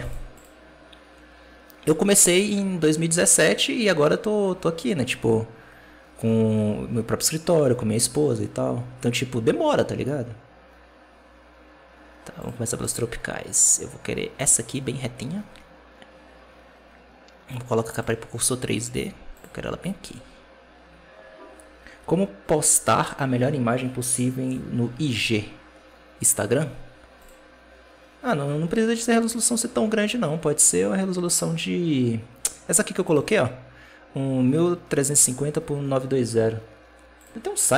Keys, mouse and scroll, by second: 0.2-3.3 drag, 12.7-15.8 drag, 17.8 click, 19.2 click, 27.1-30.2 drag, 32.9 click.